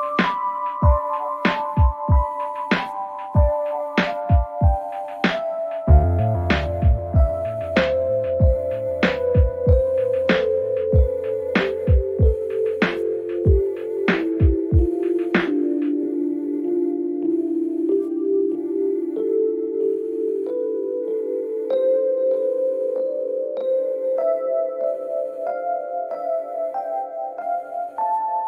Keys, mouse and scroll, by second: 2.3 click, 5.3 click, 6.3 q, 8.4 click, 10.2 click, 10.9 click, 11.2 click, 17.1 q, 18.1 ctrl+j, 19.0 click, 21.7 ctrl+click, 22.4 ctrl+click, 22.8 click, 23.0 ctrl+click, 24.9 ctrl+click, 25.2 q, 27.5 click, 28.1 click.